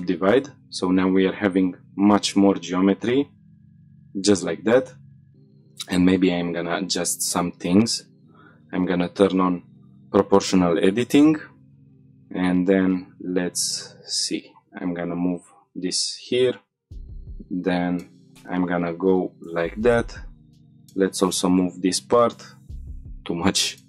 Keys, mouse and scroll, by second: 0.2 Tab, 1.3 click, 3.0 click, 3.5 scroll down 1, 3.7 shift+middle click, 3.8-4.3 middle drag, 4.9 shift+middle drag, 5.3 click, 5.6 Tab, 6.1 middle click, 6.9 middle click, 7.3 shift+middle click, 8.5 click, 9.8-10.3 scroll down 1, 10.3 1, 11.0 click, 11.4 shift+middle click, 11.9 g, 12.8 z, 13.4-14.4 scroll down 3, 14.7 click, 15.0-16.1 middle drag, 16.2 middle click, 17.0 g, 19.1 click, 20.9 middle click, 21.9 g, 22.7-23.8 scroll up 6.